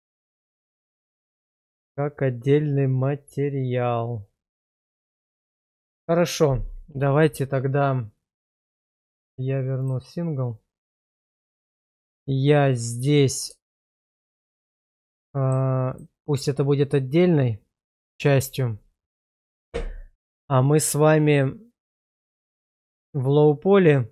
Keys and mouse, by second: 8.6-11.2 drag, 13.6 shift+middle click, 14.5-15.5 middle drag, 15.9 click, 22.0 click, 23.8 click.